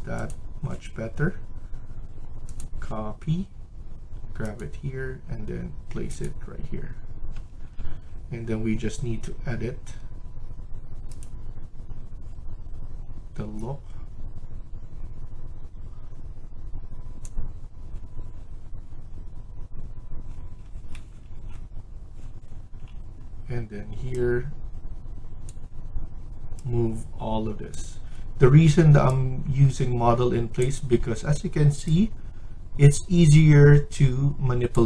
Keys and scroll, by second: 7.1 Escape, 7.4 Escape, 7.7 Escape.